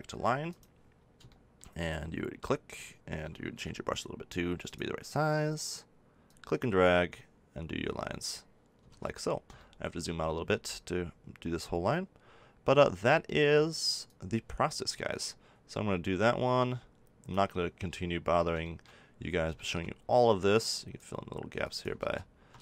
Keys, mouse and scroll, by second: 3.5 f, 8.8 ctrl+z, 14.0-15.9 drag, 18.6-20.6 middle drag, 20.6-21.9 drag, 21.9 ctrl+z, 22.5 ctrl+z.